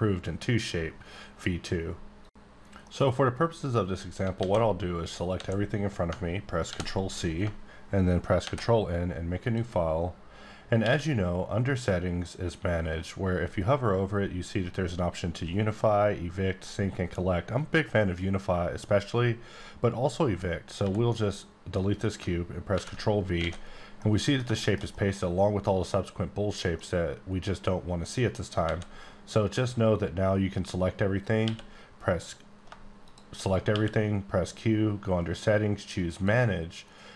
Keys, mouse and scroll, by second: 4.2 alt+Num_Lock, 4.4 alt+a, 6.7 ctrl+c, 8.4 ctrl+Tab, 8.7 n, 9.4 click, 10.3-10.8 scroll up 2, 10.8 q, 20.8 x, 21.2 click, 22.7 ctrl+v, 23.4 alt+a, 23.7 scroll down 1, 24.0 middle click, 25.6 middle click, 26.7 middle click, 28.6 a, 31.4 a, 32.6 shift+q, 33.0 shift+click, 33.7 q, 36.0 click.